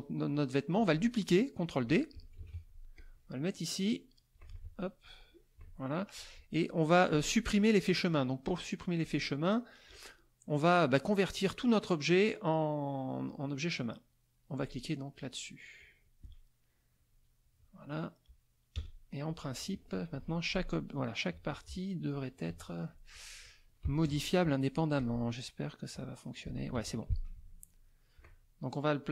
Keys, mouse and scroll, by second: 2.4 ctrl+d, 2.9-4.5 ctrl+drag, 4.5 ctrl+z, 5.0-6.3 ctrl+drag, 9.0 click, 15.8 click, 18.7 KP_Add, 19.2 middle click, 20.1 F2, 20.3 click, 21.3 z, 21.5 click, 22.0 middle click, 22.4 F2, 22.6 click, 23.1 click, 23.8 KP_Subtract, 24.0 KP_Add, 24.9 click, 25.9 click, 26.7 ctrl+z, 26.8 ctrl+click, 27.1 ctrl+F1, 27.3 ctrl+middle click, 27.7 ctrl+middle click.